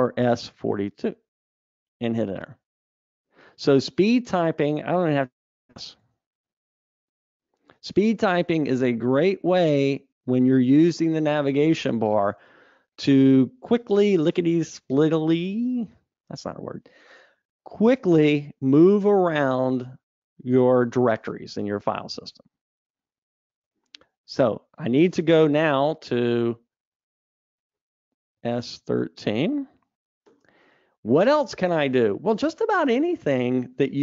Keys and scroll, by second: 23.6 Escape, 24.9 super+Up.